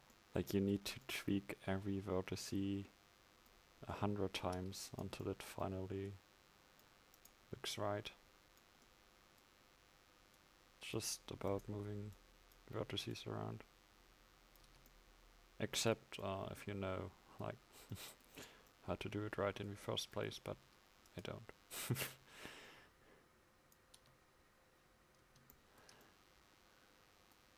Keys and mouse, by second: 0.0 Tab, 4.7 Tab, 14.7 Tab, 20.8 Tab, 24.0 Tab.